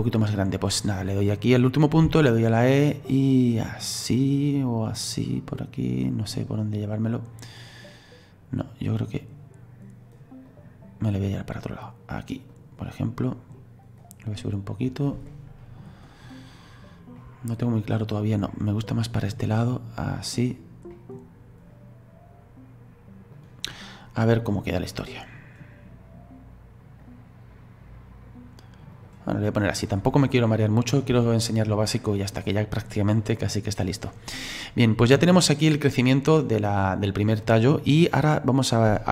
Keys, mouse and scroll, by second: 0.6 right click, 2.1 e, 6.3-8.6 middle drag, 8.6 right click, 11.3-12.8 right drag, 12.8-14.0 middle drag, 14.0 right click, 15.3-16.6 middle drag, 16.6-17.2 scroll down 2, 17.2-19.1 middle drag, 19.1 right click, 20.9 middle click, 21.7 right click, 23.7-24.1 scroll up 1, 24.1-24.8 scroll down 2, 24.8-27.0 middle drag, 27.0 right click, 29.3 middle click, 30.0-30.5 scroll up 2, 30.5-31.3 scroll down 1, 31.3-34.6 shift+middle drag, 34.6-37.6 drag.